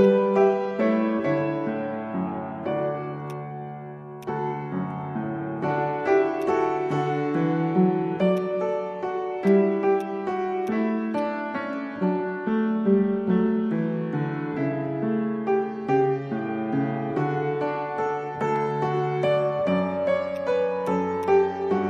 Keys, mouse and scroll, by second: 0.6-2.0 typing, 2.4 Return, 4.7-5.5 typing, 5.6 Return, 9.0 ctrl+z.